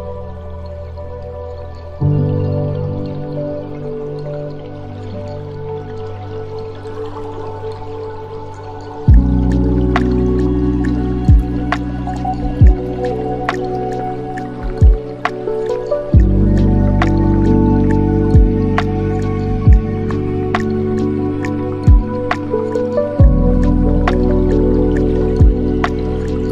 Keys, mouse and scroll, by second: 0.3-2.0 drag, 2.0-2.5 scroll up 17, 4.3 click, 5.6-7.6 drag, 7.6-8.0 scroll down 2, 8.4 click, 8.9-9.7 scroll down 2, 10.4-13.1 drag, 13.1 scroll down 2, 13.1 scroll up 1, 13.2-14.2 scroll down 4, 14.2-14.8 scroll down 1, 14.8-15.3 drag, 15.3 scroll down 1, 15.3 scroll up 1, 15.4-15.9 scroll down 1, 15.9-17.2 scroll down 6, 17.2-20.3 drag, 20.7-21.7 scroll up 12, 21.9-22.5 scroll up 8, 23.1-23.6 scroll down 5, 23.6 middle click, 24.5 shift+a.